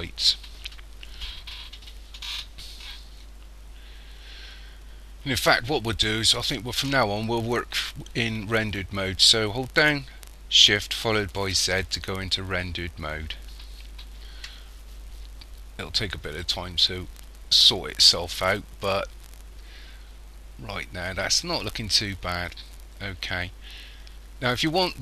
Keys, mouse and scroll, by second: 11.4 shift+z.